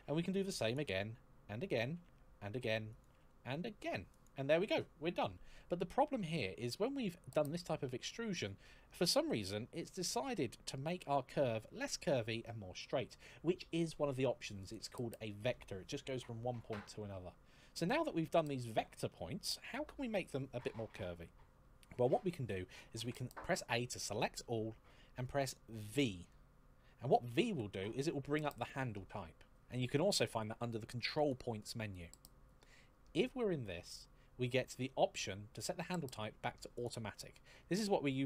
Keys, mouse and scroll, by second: 0.4 click, 0.7 e, 2.7 e, 2.9 click, 3.9 e, 5.8-6.2 scroll down 1, 6.2-7.8 scroll up 1, 8.7 click, 22.8 a, 27.3 v, 31.0 click, 36.6 click.